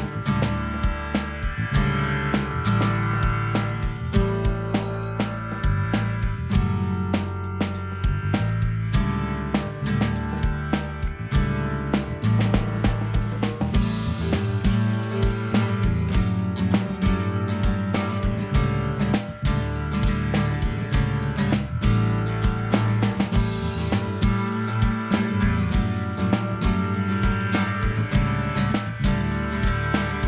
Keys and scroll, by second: 9.2 super+=, 16.5 super+=.